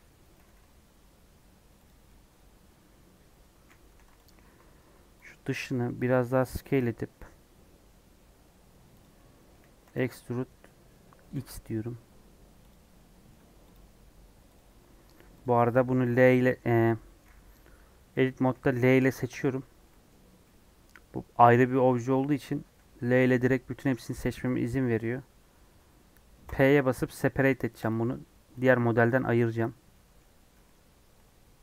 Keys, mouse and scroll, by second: 0.4 g, 2.0-3.8 middle drag, 3.8 2, 4.2 alt+click, 5.2 alt+click, 5.7 middle click, 6.3 s, 9.1 middle click, 9.8 e, 13.0 middle click, 13.3 Tab, 13.7 click, 14.0 scroll down 2, 14.5 click, 14.8 Tab, 15.1 3, 17.2-18.9 scroll down 1, 19.3 l, 19.8-24.3 middle drag, 24.3-26.1 scroll up 3, 27.9 p, 28.8 Tab, 29.1 click, 29.5 click, 29.7 scroll down 2, 29.9 middle click, 30.1 scroll up 1, 30.6-31.6 middle drag.